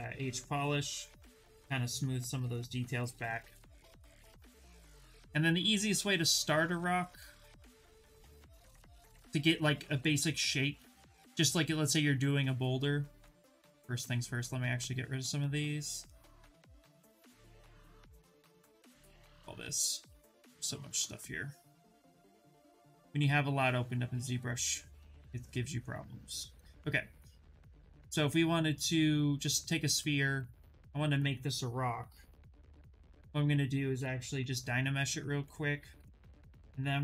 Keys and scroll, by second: 0.0-0.3 typing, 2.6 ctrl+z, 2.8 ctrl+z, 2.9 ctrl+z, 3.1 ctrl+z, 3.2 ctrl+z, 8.0 Return, 32.8 shift+f, 34.0 2.